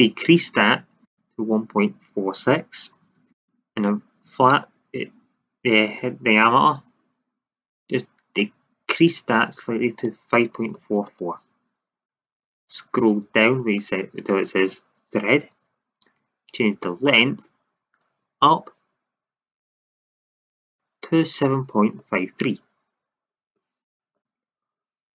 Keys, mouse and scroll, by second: 8.4-9.6 drag, 10.0-11.8 drag, 12.7-15.6 middle drag, 12.7-15.6 scroll down 1, 17.0-18.9 drag, 22.5-23.9 middle drag, 23.9-25.1 drag.